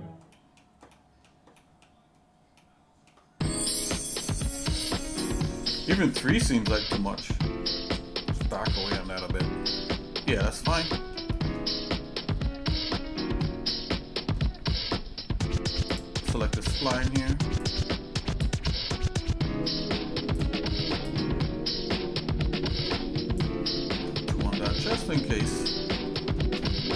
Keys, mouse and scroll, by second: 0.3 middle click, 0.9 shift+middle click, 1.6 shift+middle click, 2.6 shift+middle click, 4.2 scroll down 2, 8.6 click, 9.7 shift+middle click, 10.9 middle click, 11.3 middle click, 12.0-12.6 scroll up 3, 13.4 middle click, 14.8 scroll down 1, 15.9 click, 17.7 click, 20.5 click, 21.2-23.5 drag, 24.4 middle click, 25.2 shift+middle click, 25.7 shift+middle click, 26.1 shift+middle click, 26.6 middle click.